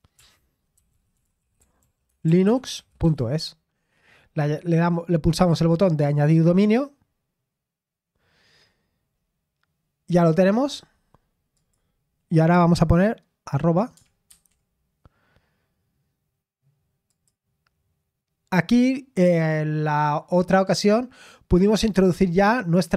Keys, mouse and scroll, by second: 0.9-3.6 typing, 4.7-7.3 drag, 8.6-11.5 scroll down 3, 11.5 click, 17.1 click, 22.8 click.